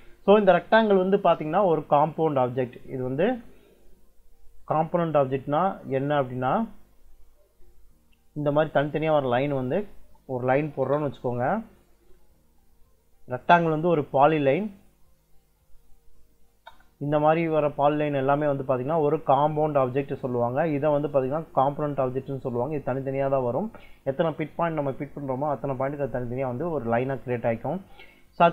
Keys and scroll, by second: 6.2 Escape, 9.6 Escape, 10.5 l, 10.6 space, 16.3 space, 20.8 Escape, 27.4 Escape.